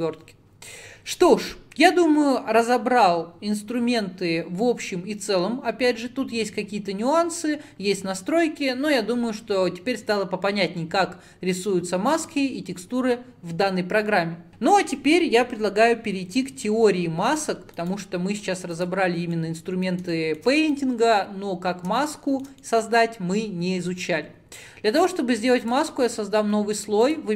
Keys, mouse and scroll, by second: 19.4-21.1 middle drag, 21.1-21.4 scroll down 1, 21.4-22.1 scroll up 3, 22.1-27.3 shift+middle drag.